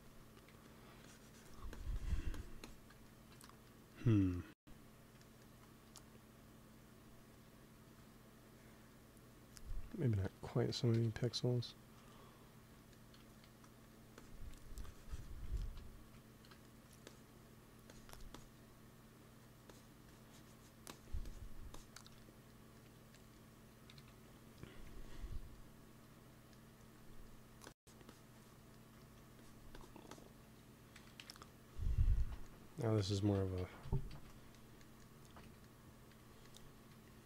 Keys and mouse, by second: 0.3 f, 0.9-4.4 drag, 5.7 t, 6.6-10.8 drag, 10.8 KP_1, 11.4 t, 13.7 f, 14.2-15.6 drag, 14.4 f, 17.0-23.5 drag, 19.1 f, 23.8 KP_1, 26.7 click, 27.3 middle click, 27.5-31.1 drag, 31.1 KP_1, 33.2 ctrl+z, 33.4 ctrl+z, 33.8 ctrl+z, 34.1 ctrl+z, 35.3 g, 35.8 f, 36.7 f.